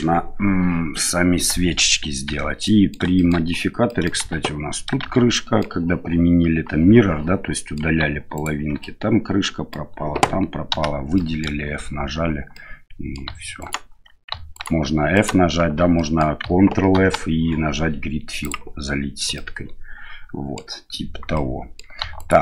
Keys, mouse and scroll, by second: 2.2 Tab, 2.6 middle click, 3.1 shift+middle click, 3.8 middle click, 4.2 shift+z, 5.0 shift+z, 5.3 middle click, 7.5 middle click, 8.3 alt+right click, 8.8 middle click, 10.7 f, 11.1 middle click, 12.5 middle click, 13.5 alt+right click, 14.5 alt+right click, 15.1 alt+right click, 15.9 middle click, 16.9 ctrl+f, 19.3-20.5 middle drag, 21.3 middle click, 22.1 alt+right click.